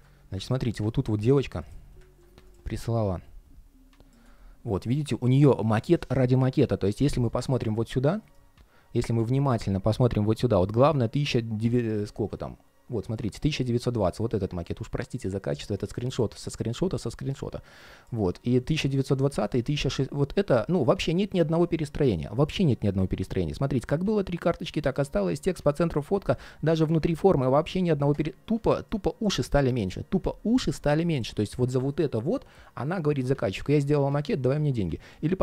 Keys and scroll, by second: 1.8 super+\.